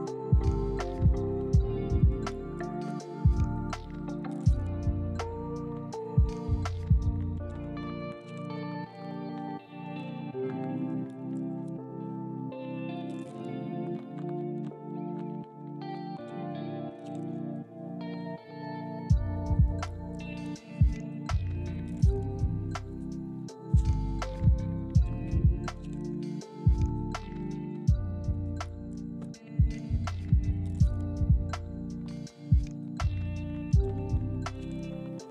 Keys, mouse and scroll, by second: 1.1 middle click, 1.4 u, 1.7 middle click, 2.4 u, 2.7 middle click, 3.2 u, 3.6 middle click, 5.5 ctrl+z, 5.6 ctrl+z, 5.7 ctrl+z, 6.2 middle click, 7.3 double click, 7.4 middle click, 8.0 ctrl+click, 8.2 middle click, 8.6 ctrl+click, 8.9 ctrl+click, 9.0 u, 9.4 middle click, 11.0 ctrl+click, 11.4 ctrl+click, 11.7 ctrl+click, 12.1 ctrl+click, 12.6 ctrl+click, 12.9 ctrl+click, 13.6 u, 14.6 ctrl+click, 14.9 ctrl+click, 15.2 ctrl+click, 15.5 ctrl+click, 16.0 ctrl+click, 16.4 middle click, 17.2 ctrl+click, 17.5 ctrl+click, 17.8 ctrl+click, 18.5 ctrl+click, 18.8 ctrl+click, 19.0 ctrl+click, 19.6 middle click, 23.2 ctrl+click, 23.4 ctrl+click, 23.9 middle click, 24.6 a, 25.2 scroll up 1, 25.6 scroll down 1, 25.8 shift+middle click, 28.2 middle click, 32.8 g, 34.2 g.